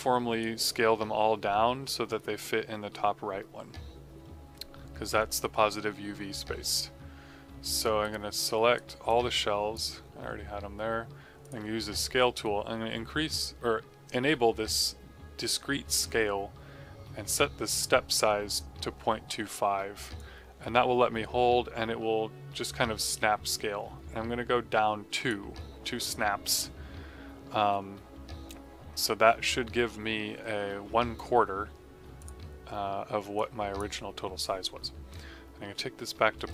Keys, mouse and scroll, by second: 7.9 right click, 9.0 click, 20.1 click, 32.1 click, 36.2 KP_Decimal, 36.4 KP_0.